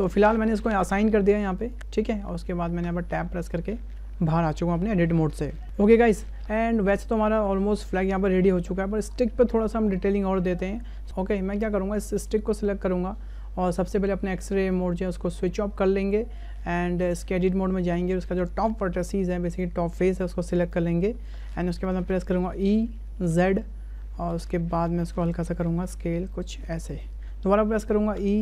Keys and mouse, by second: 2.8 Tab, 7.8-8.9 shift+middle drag, 9.9 shift+middle click, 10.6 shift+middle drag, 12.1 click, 16.1-16.5 middle drag, 17.4 Tab, 18.1 shift+middle click, 19.0 3, 19.5 middle click, 20.3 `, 21.4 shift+click, 22.5 e, 25.6 s, 27.2 ctrl+z, 28.2 e.